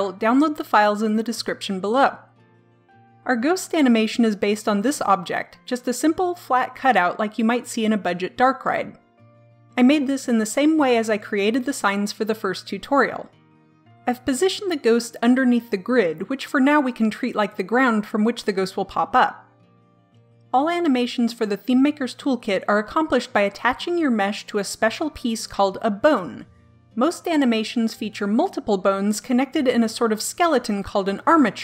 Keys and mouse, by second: 4.5-6.5 middle drag.